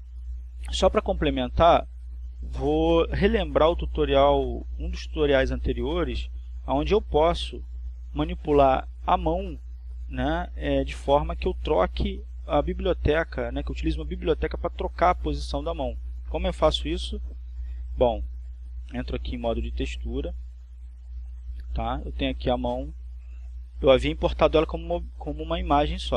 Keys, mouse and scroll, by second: 3.7 r, 6.4 click, 10.9 right click, 23.1 click, 24.5 click, 25.4 click.